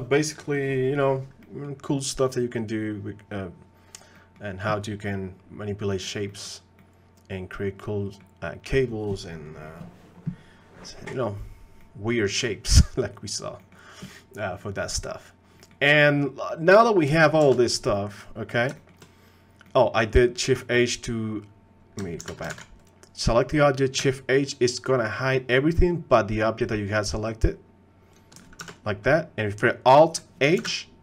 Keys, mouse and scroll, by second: 1.4 click, 2.2 click, 4.1 middle click, 6.3 middle click, 6.8-8.2 middle drag, 11.8 middle click, 12.3 middle click, 13.6 middle click, 14.8 middle click, 15.6 click, 16.5 click, 17.5 shift+h, 18.8 shift+middle click, 19.6 click, 22.2 alt+h, 24.0 alt+a, 28.1 click, 28.6 shift+h, 30.6 alt+h.